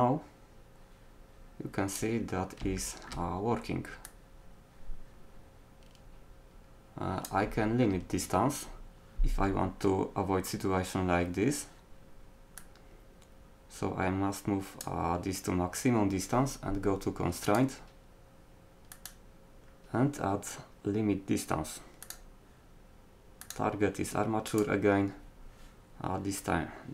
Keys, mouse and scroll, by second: 0.1-2.0 drag, 4.1-5.9 drag, 17.5-20.8 drag, 23.4-25.3 drag.